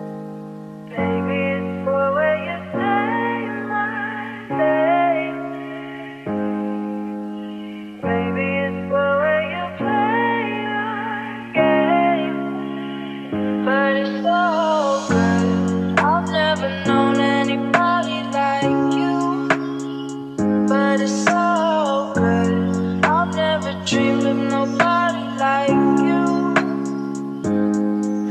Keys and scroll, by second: 0.8 Return, 13.8 u, 20.1 space, 22.5 space.